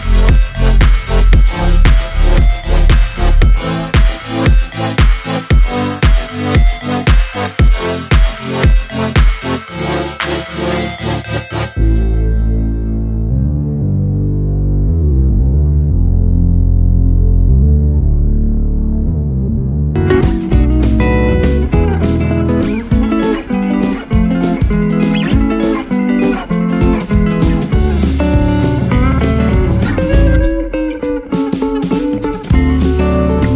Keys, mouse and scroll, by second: 4.5-6.7 scroll down 5, 6.7 click, 7.4 click, 8.0 click, 10.1-12.0 drag, 14.6-21.8 drag, 25.1 click, 26.8-28.2 drag, 28.6 scroll down 1, 29.9 click, 31.0-32.3 drag, 32.5-33.5 drag.